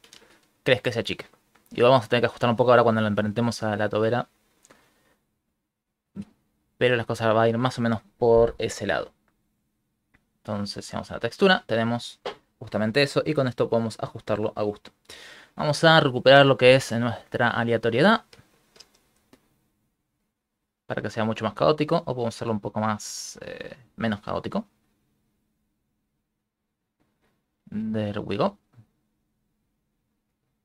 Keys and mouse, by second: 0.1 shift+space, 6.1 Tab, 6.7 right click, 9.7 click, 10.1 click, 10.9 click, 12.9 click, 14.5 click, 16.3 click, 17.5 click, 21.1 click, 22.5 click.